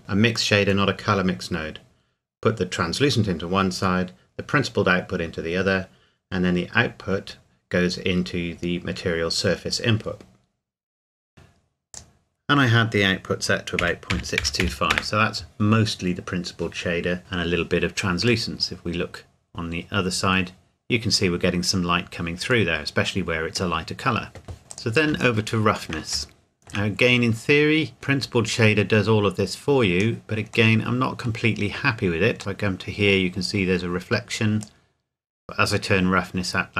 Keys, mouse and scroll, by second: 1.2 click, 5.7 click, 6.8 click, 11.9 click, 13.8 KP_Decimal, 14.1 KP_6, 14.4 KP_2, 14.6 KP_5, 14.9 KP_Enter, 18.5 middle click, 20.6-20.9 scroll up 1, 22.7 middle click, 24.6 scroll down 1, 24.7 click, 25.6-25.9 shift+scroll up 1, 26.3 shift+middle click, 26.9-27.9 scroll up 1, 27.9 click, 30.7 middle click, 34.6 click.